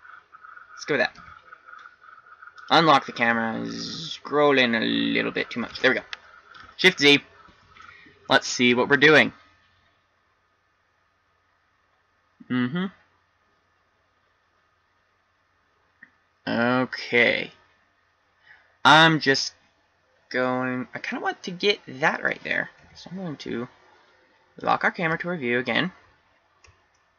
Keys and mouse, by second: 0.0-1.3 middle drag, 1.3 n, 3.3 n, 3.7-4.8 middle drag, 6.6 shift+z, 23.6 n, 24.8 click, 25.6 n.